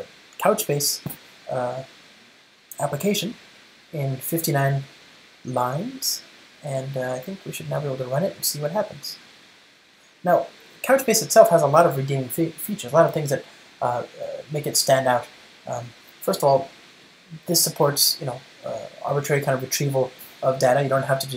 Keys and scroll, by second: 10.5 ctrl+shift+r.